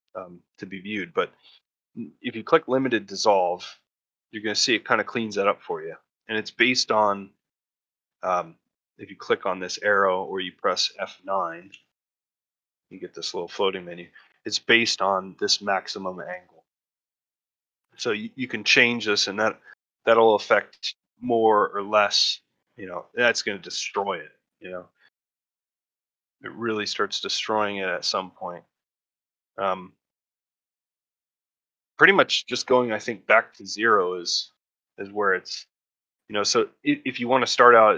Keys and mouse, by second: 4.4-5.5 middle drag, 5.8 middle click, 6.3 middle click, 9.7 click.